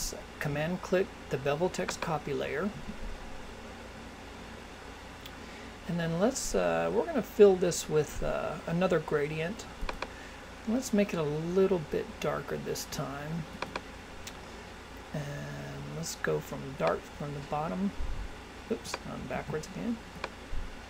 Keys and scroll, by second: 19.3 super+z.